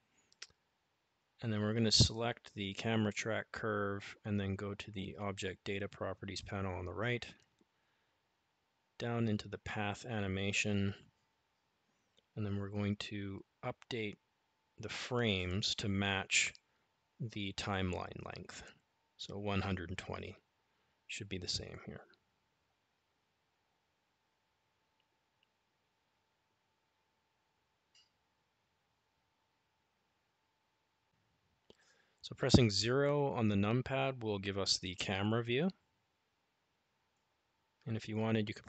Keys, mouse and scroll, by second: 7.5 click, 13.7-17.4 drag, 27.6 click, 32.3 click, 33.2 KP_0.